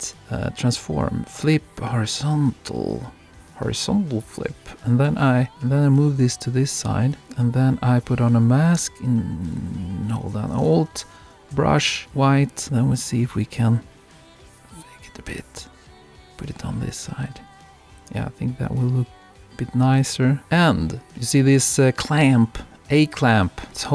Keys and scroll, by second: 17.8 super+-, 23.0 super+-.